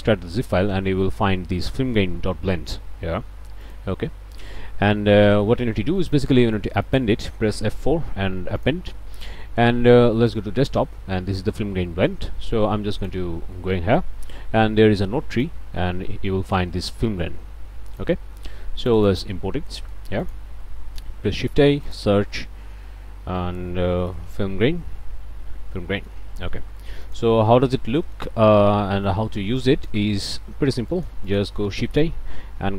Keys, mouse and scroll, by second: 3.6 click, 6.0 click, 6.8 click, 7.8 F4, 8.6 click, 10.3 click, 12.9 click, 15.3 click, 17.9 click, 18.8 click, 19.8 click, 20.2 click, 21.3 shift+a, 21.9 shift+click, 24.0 f, 24.1 i, 24.3 l, 25.2 Down, 26.0 Return, 27.0 click, 27.4-27.8 scroll up 1, 27.9 click, 28.5 scroll down 1, 28.9 click, 29.6 click, 30.1 click, 30.9 click, 31.6 shift+a, 31.9 shift+click.